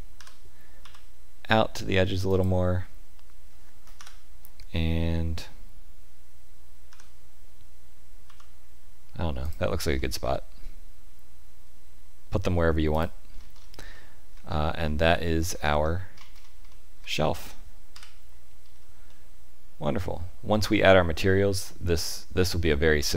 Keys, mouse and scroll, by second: 0.1 g, 3.9 KP_7, 6.8 g, 9.9 middle click, 12.9 click, 13.3-13.7 scroll down 4, 13.9 shift+middle click, 14.4 middle click, 15.1 shift+middle click, 15.6 middle click, 16.1-16.6 scroll up 5, 16.6 shift+middle click, 17.0 middle click, 17.9 KP_5, 18.7-19.0 scroll down 1, 19.0 middle click.